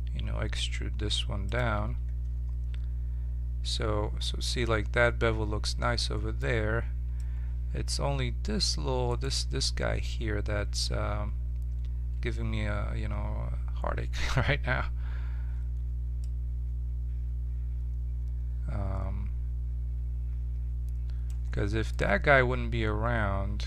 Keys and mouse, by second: 1.7 Tab, 5.6-8.9 middle drag, 9.0-14.0 right drag, 16.2-18.0 drag, 21.5-23.2 middle drag.